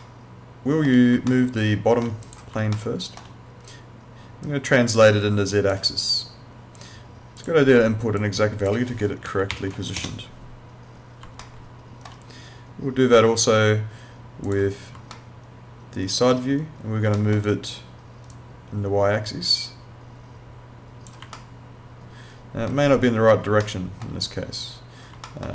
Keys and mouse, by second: 0.0 alt+middle click, 1.3 alt+middle click, 2.3 click, 2.8 alt+middle click, 4.5 click, 7.4 click, 9.3-10.1 typing, 10.1 Return, 11.4 alt+middle click, 14.4 click, 15.2 alt+middle click, 17.2 alt+middle click, 18.3 click, 21.4 alt+middle click, 23.7 alt+middle click, 25.3 alt+middle click.